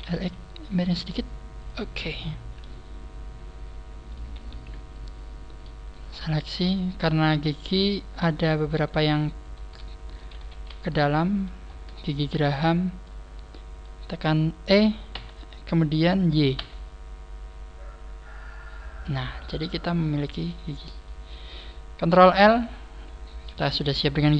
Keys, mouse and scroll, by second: 1.7 click, 1.8 scroll down 4, 2.1 middle click, 5.9 right click, 6.1 shift+right click, 6.5 shift+right click, 7.4 shift+right click, 7.8 shift+right click, 8.3 shift+right click, 10.3 ctrl+z, 10.3 shift+right click, 11.0 ctrl+z, 11.0 middle click, 11.6 scroll up 3, 11.9 shift+right click, 12.7 shift+right click, 12.7 scroll down 3, 12.9 middle click, 15.1 e, 19.3 click, 19.3-19.7 scroll down 4, 19.5 middle click, 20.7 middle click, 22.3 ctrl+l, 23.4 KP_3.